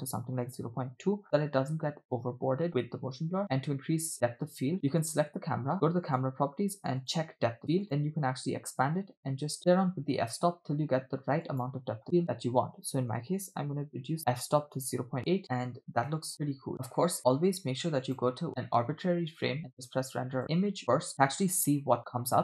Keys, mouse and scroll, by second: 5.0 click, 6.1 click, 7.1 click, 7.8 click, 9.4 scroll down 2, 11.4-15.4 drag, 15.4 scroll down 4, 16.3 scroll down 2, 16.7 shift+middle click, 16.7 scroll up 1, 17.1 scroll down 1, 18.2 click, 19.8-22.4 drag.